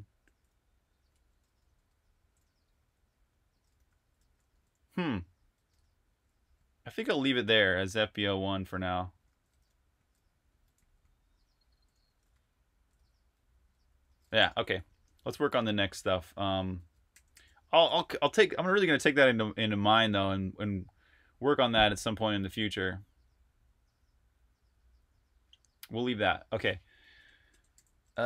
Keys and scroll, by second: 0.0-7.3 typing, 8.8-14.4 typing, 16.6 Escape, 16.9-17.5 typing, 27.1-28.2 typing.